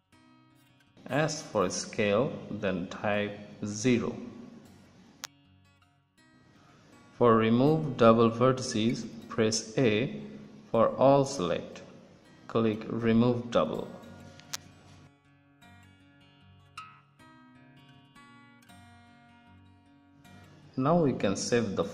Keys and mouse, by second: 0.7 e, 1.3 s, 4.5-5.5 drag, 11.3 a, 11.7 a, 14.1-16.0 drag, 17.0 click, 17.7-20.3 middle drag, 21.4 Tab.